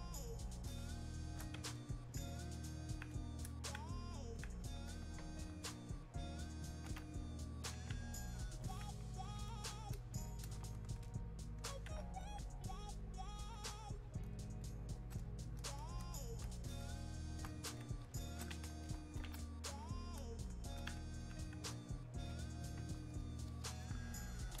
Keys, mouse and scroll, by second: 1.8-14.6 alt+drag, 17.8 shift+click, 20.2-24.6 drag.